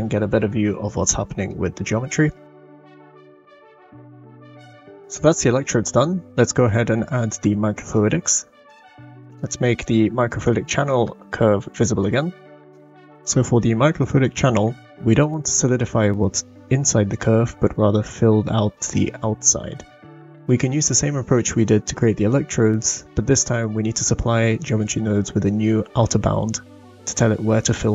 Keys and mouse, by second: 0.6 middle click, 1.9 middle click, 2.3-3.7 drag, 4.0 middle click, 4.9 click, 5.0-5.5 middle drag, 8.6 click, 9.3 click, 10.4 click, 12.6 shift+middle click.